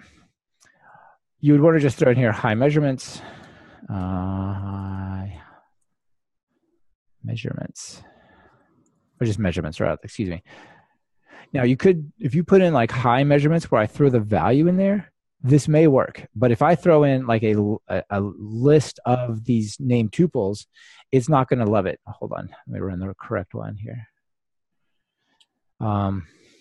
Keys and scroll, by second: 3.6 Return, 11.7 Return, 12.2 Return, 21.0 ctrl+r, 24.8 ctrl+shift+r.